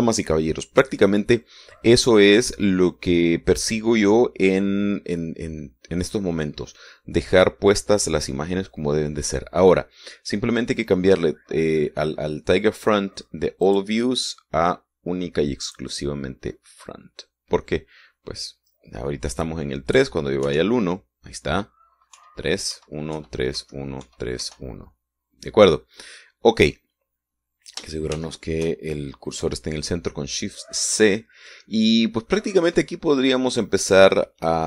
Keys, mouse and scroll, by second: 0.2-14.8 scroll down 1, 14.8 click, 16.8 click, 21.6 KP_1, 23.3-25.6 typing, 29.3 shift+c, 31.6 scroll down 2, 32.1-32.5 scroll up 2.